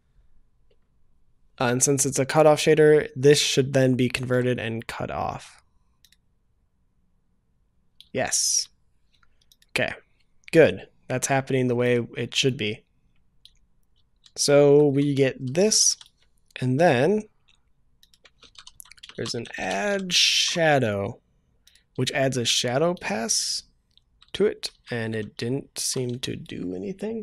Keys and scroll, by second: 20.3 ctrl+s.